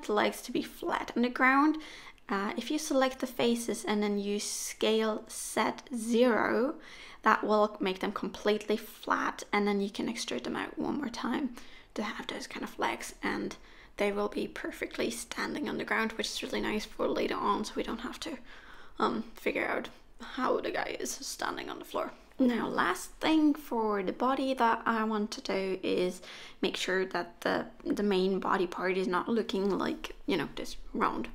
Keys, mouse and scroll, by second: 1.5 middle click, 2.3 KP_1, 3.0-3.5 scroll up 1, 3.5 shift+middle click, 5.1 g, 6.7 e, 10.3 s, 14.1 e, 17.6 s, 20.9 e, 22.1 s, 24.6 scroll down 1, 24.9 shift+middle click, 25.6-26.7 scroll down 2, 26.7-27.1 scroll up 1, 27.3 shift+middle click, 30.8 middle click, 31.2 Tab, 31.2 middle click, 31.2 n.